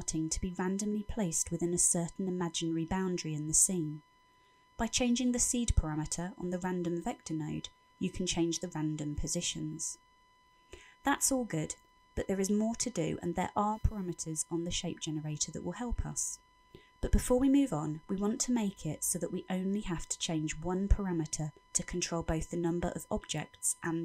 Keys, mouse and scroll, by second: 7.8 shift+click, 12.9 middle click, 15.9-16.3 scroll down 4, 16.3 middle click, 17.2-17.6 scroll down 3, 17.6 middle click, 18.5 middle click, 20.1 click, 21.5 middle click, 22.4-23.0 scroll down 4, 23.0 middle click.